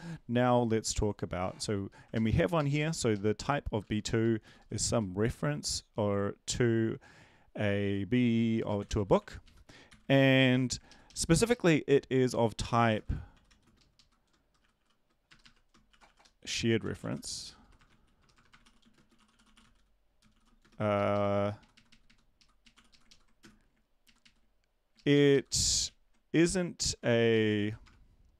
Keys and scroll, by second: 2.1 Left, 2.5 Left, 2.7 Left, 2.9 Left, 4.3-5.1 typing, 8.6-9.6 typing, 9.9 ctrl+s, 10.5 Left, 11.1 ctrl+shift+Left, 13.6-20.8 typing, 20.9 ctrl+Left, 21.1 ctrl+Left, 21.6 Right, 21.7 Right, 21.9 Right, 22.1-24.2 typing, 24.2 ctrl+Left, 24.9 ctrl+Left, 25.1 ctrl+Left, 25.3 ctrl+Left, 25.8 shift+Right, 26.3-27.0 shift+Right, 27.6 ctrl+x, 27.8 BackSpace.